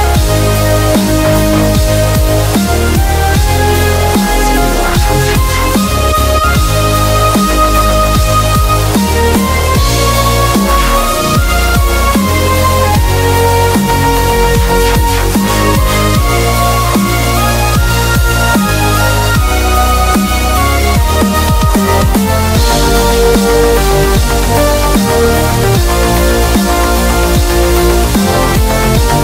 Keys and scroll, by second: 17.6 super+=, 17.9 b.